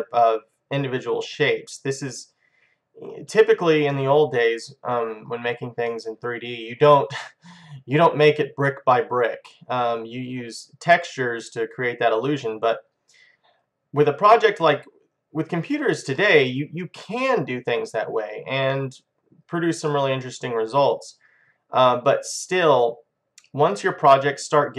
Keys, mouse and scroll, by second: 0.1 middle click, 0.8 middle click, 4.2-6.1 middle drag, 6.3-8.1 middle drag, 10.1 middle click, 17.4-19.4 middle drag, 20.6 middle click, 21.8 middle click.